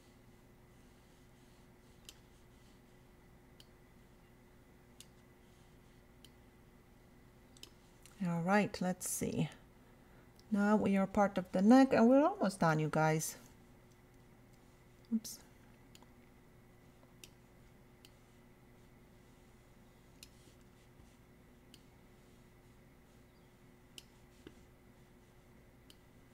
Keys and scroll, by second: 12.7 [, 13.5 ].